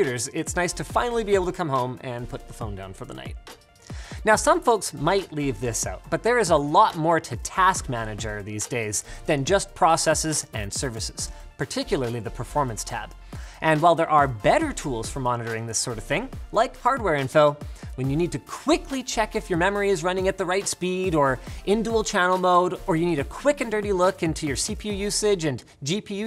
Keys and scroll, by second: 18.7 ctrl+shift+Escape.